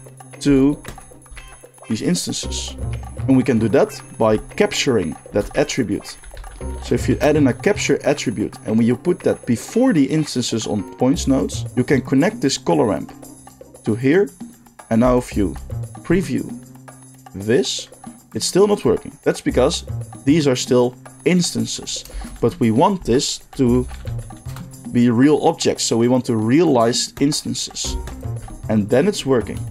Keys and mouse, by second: 0.8 ctrl+shift+click, 4.1-11.7 shift+middle drag, 5.2 shift+a, 11.7-27.4 drag, 22.1 shift+a, 27.4 middle click, 28.0 ctrl+shift+click, 28.1-29.7 ctrl+shift+middle drag.